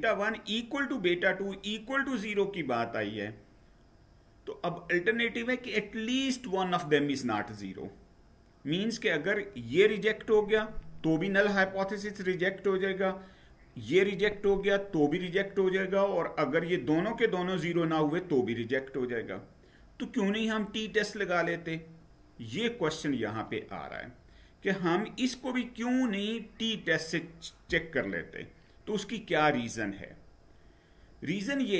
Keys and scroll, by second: 29.6 Down.